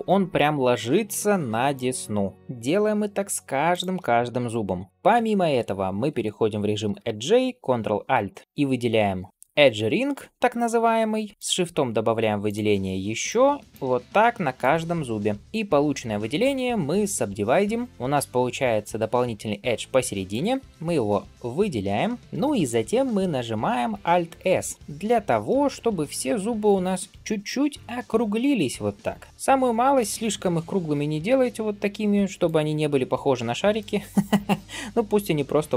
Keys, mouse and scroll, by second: 0.5 shift+middle click, 1.3 ctrl+r, 2.3 ctrl+r, 4.8 ctrl+r, 8.0 ctrl+alt+click, 11.3 ctrl+alt+shift+click, 12.3 ctrl+alt+shift+click, 13.1 ctrl+alt+shift+click, 14.4 ctrl+alt+shift+click, 15.3 ctrl+alt+shift+click, 16.8-17.9 right drag, 20.1 alt+click, 20.9 alt+shift+click, 21.7 alt+shift+click, 22.2 middle click, 24.5 alt+s, 29.3 middle click, 30.4 alt+s, 33.1 ctrl+z, 33.6-35.7 middle drag.